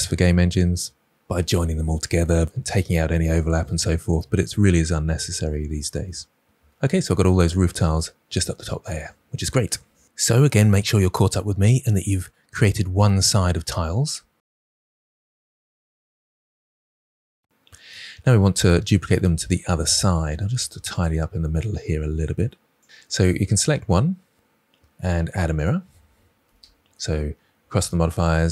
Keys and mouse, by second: 19.8 click, 20.4 g, 21.0 click, 21.3 click, 21.4 g, 22.3-22.6 shift+middle drag, 25.7-28.5 drag, 27.0 r.